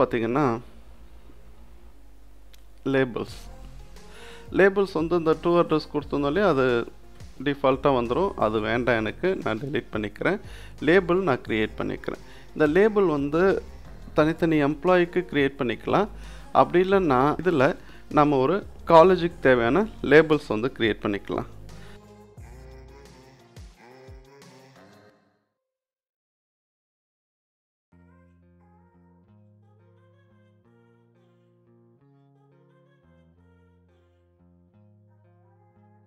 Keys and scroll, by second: 9.6 Delete, 22.0-23.4 typing, 24.1 Return, 25.5-28.1 typing, 29.2 Return, 29.9-30.7 typing, 32.0-35.7 typing, 32.7 Return.